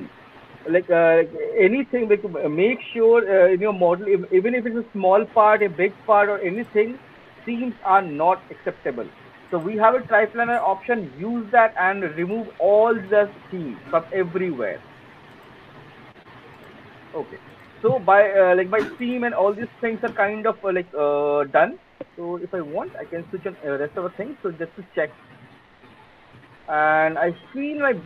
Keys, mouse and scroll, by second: 11.9 alt+click, 12.5 alt+middle click, 12.9 alt+middle click, 14.6 alt+click, 15.2 alt+middle click, 15.4 alt+middle click, 17.1 alt+click, 17.3 alt+middle click, 17.6 alt+middle click, 18.3 alt+middle click, 18.5 alt+middle click, 19.4 alt+middle click, 20.2 alt+right click, 20.4 alt+middle click, 20.8 alt+right click, 21.7 alt+click, 22.7 click, 23.6 alt+click, 24.1-26.2 alt+middle drag, 26.2 alt+click, 27.3 alt+click, 27.7-28.0 alt+middle click, 27.7 alt+right click.